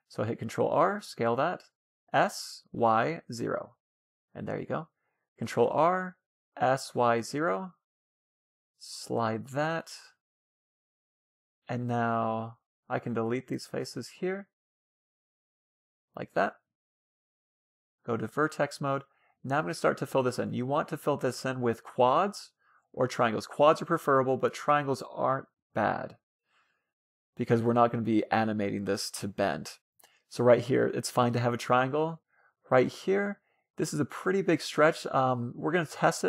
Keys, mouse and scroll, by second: 1.2 s, 3.5-5.1 drag, 4.7 ctrl+r, 8.4-9.9 drag, 10.7-11.9 middle drag, 11.9-13.5 drag, 12.4 a, 12.5 a, 12.7 c, 14.1-15.6 right drag, 14.5 Delete, 15.9 a, 16.2 middle click, 16.3 a, 17.1-18.6 drag, 17.7-21.6 middle drag, 20.6-29.9 right drag, 22.4 f, 25.1 f, 27.0 f, 28.6 f, 29.9-34.7 right drag, 30.9 f, 31.2-32.7 middle drag, 35.8-36.2 right drag.